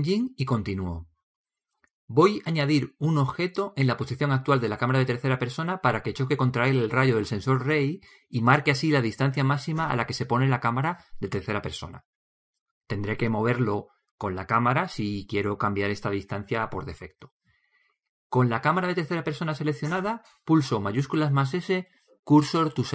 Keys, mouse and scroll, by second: 12.4-14.7 middle drag, 20.0-21.9 right drag, 21.9 shift+s.